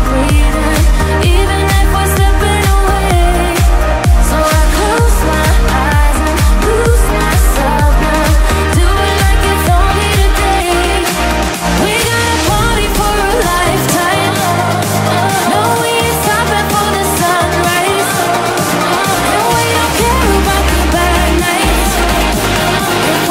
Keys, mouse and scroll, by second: 3.4 ctrl+z, 3.9 ctrl+z, 4.8 ctrl+z, 5.9 ctrl+z, 7.1 ctrl+z, 9.2 click, 10.6 click, 11.6 click, 13.7 click, 14.5 click, 16.8 click.